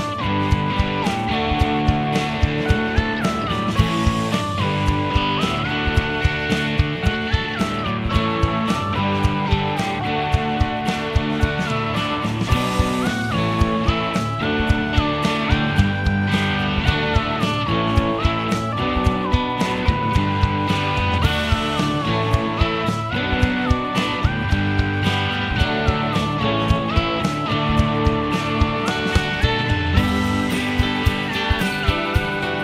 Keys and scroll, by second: 1.2-11.0 typing, 11.8 Return, 12.7-14.5 typing, 15.0 Return, 17.4 Return.